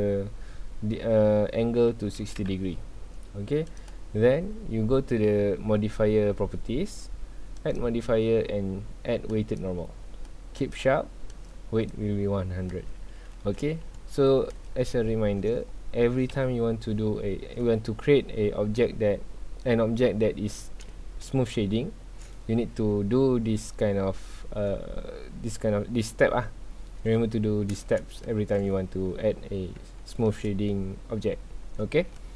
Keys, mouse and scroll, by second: 2.4 KP_Enter, 3.7 click, 7.6-10.7 drag, 11.3-12.8 drag, 12.8 scroll down 1, 13.2-13.6 middle drag, 13.6 alt+a, 14.4-15.4 middle drag, 15.4 scroll up 2, 16.3 KP_1, 17.4 scroll down 1, 20.9-21.5 scroll up 2, 21.5-24.5 shift+middle drag, 28.1-28.7 shift+middle drag, 28.7 scroll down 1, 29.0 middle click, 29.4 scroll up 2, 29.9-32.3 shift+middle drag.